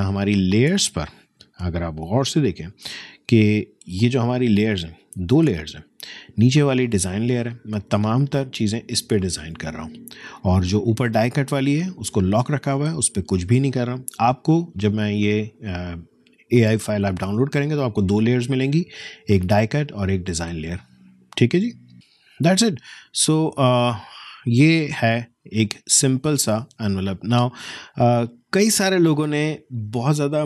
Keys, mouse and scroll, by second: 3.3 F10, 8.1 click, 11.1 click, 20.5 click, 21.9 F10, 22.8 F10, 22.9 alt+scroll up 1, 25.2 alt+scroll down 1, 25.3 space, 25.5 click, 25.7 space, 26.8 alt+scroll up 1.